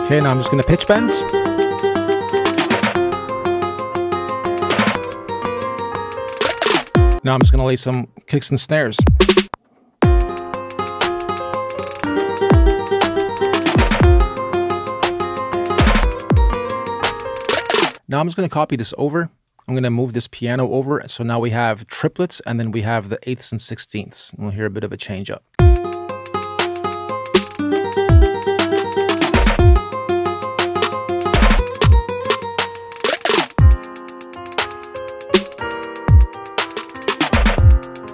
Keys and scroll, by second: 7.2 space, 7.6 BackSpace, 9.4 space, 9.4 r, 25.3 space.